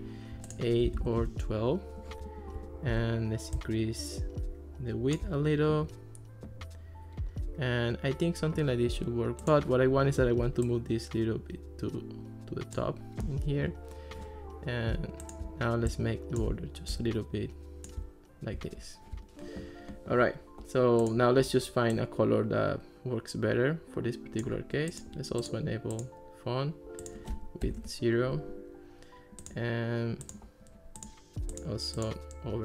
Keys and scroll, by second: 0.9 1, 1.2 Return, 1.2 2, 27.7 0, 27.8 Return.